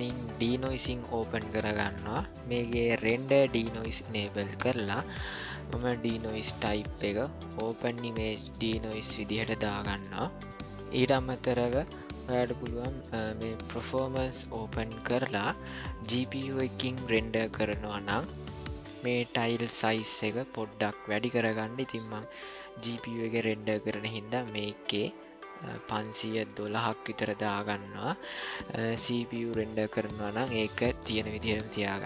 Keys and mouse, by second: 0.3 click, 3.1 click, 6.1-9.9 drag, 13.7 click, 24.0-28.3 drag.